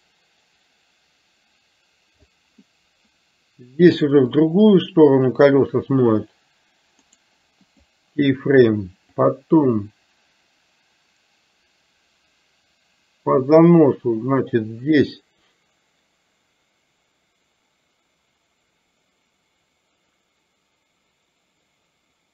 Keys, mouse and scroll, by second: 4.5-5.6 drag, 7.1 right click, 9.2-22.3 drag.